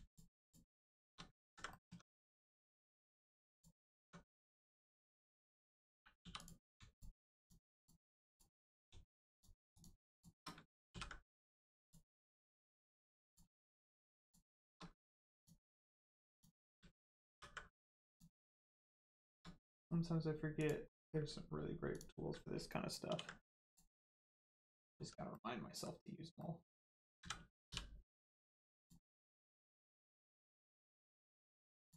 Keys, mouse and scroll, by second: 0.0 shift+click, 0.4 shift+click, 0.6 shift+middle click, 1.3 ctrl+middle click, 1.6 middle click, 1.8 Tab, 3.4 click, 4.0 Tab, 4.2 middle click, 6.2 2, 6.3 click, 6.8 shift+click, 7.3 shift+click, 8.6 middle click, 8.6 middle click, 9.2 shift+click, 9.6 shift+click, 10.5 ctrl+click, 10.8 ctrl+e, 11.8 click, 12.2 middle click, 13.2 click, 14.2 shift+click, 15.3 ctrl+click, 16.2 ctrl+click, 17.2 ctrl+e, 18.0 click, 18.4 middle click, 19.1 shift+middle click, 19.4 scroll down 1, 19.6 middle click, 20.5 click, 20.8 middle click, 21.8 ctrl+click, 23.6 click, 24.0 middle click, 24.4 Tab, 24.7 middle click, 24.9 Tab, 25.2 middle click, 28.7 click, 29.3 scroll down 1, 31.8 click.